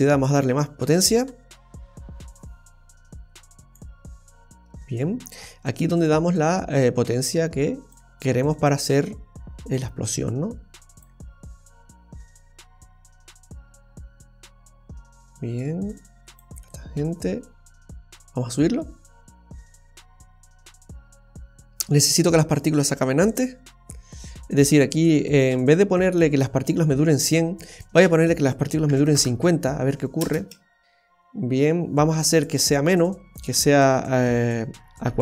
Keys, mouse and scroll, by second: 0.2 click, 6.0 click, 10.1 click, 16.7 click, 17.8 click, 22.3 scroll up 1, 22.8-23.4 scroll up 7, 23.7-24.4 scroll down 1, 27.2 click, 30.2 space, 33.4 click.